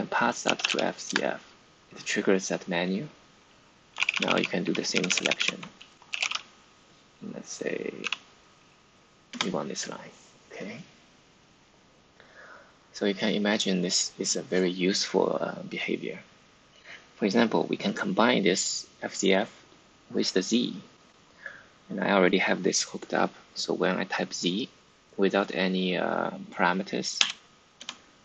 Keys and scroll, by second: 0.0-1.1 typing, 3.9 Down, 4.0 Down, 4.2 Down, 4.3 Down, 4.4 Down, 4.5 Down, 4.8 Up, 5.0 Up, 5.1 Up, 5.3 Up, 5.7-6.6 typing, 7.9 d, 9.2 Return, 27.1 z, 27.7 Return.